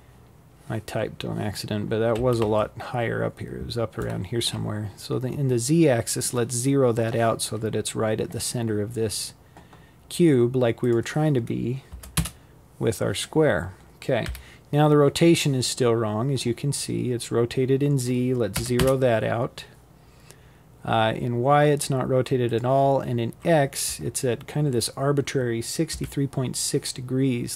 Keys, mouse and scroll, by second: 2.5-4.0 scroll up 5, 8.5-11.3 drag, 11.3-11.9 scroll down 3, 11.9 KP_7, 15.6-18.6 drag, 20.1-23.2 drag, 23.5 KP_3, 25.3-27.5 drag.